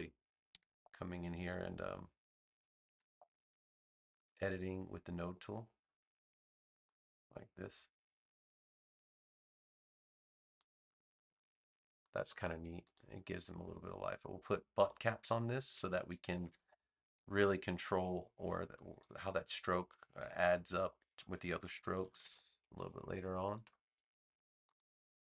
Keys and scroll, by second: 0.5 a, 2.8 a, 16.3 alt+=, 21.0 v, 21.9 super+=.